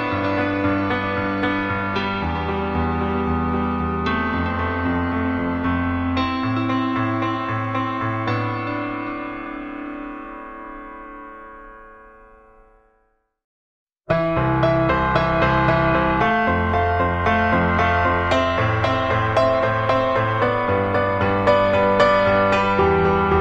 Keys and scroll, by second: 2.7 Delete, 2.8 Delete.